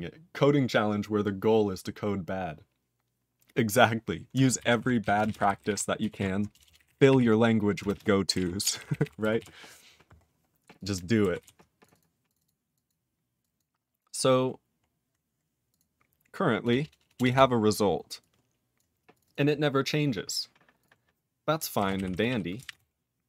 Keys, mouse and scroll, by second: 4.8 ctrl+s, 5.1 ctrl+a, 5.2 ctrl+space, 5.2 ctrl+e, 5.3 ctrl+n, 5.5 ctrl+n, 5.6 ctrl+g, 5.7 ctrl+e, 6.2 ctrl+s, 6.5-7.7 typing, 7.9 ctrl+space, 7.9 ctrl+a, 8.3 ctrl+g, 8.4 ctrl+e, 8.6 ctrl+a, 8.8 ctrl+k, 8.9 ctrl+k, 9.0 ctrl+k, 9.4 ctrl+s, 10.2 scroll down 3, 10.8 click, 10.8 click, 11.4 ctrl+s, 11.8 click, 11.8 click, 11.9 double click, 12.0 double click, 12.3 click, 12.3 click, 12.4 double click, 12.4 double click, 12.7 click, 12.8 click, 13.4 click, 13.5 click, 13.6 click, 13.9-15.0 scroll up 15, 15.7 click, 15.8 click, 17.2 Return, 17.3 Return, 18.2 click, 18.7 click, 19.1 click, 19.2 click, 19.2 double click, 19.3 double click, 20.8 click, 20.9 click, 21.5-23.2 typing.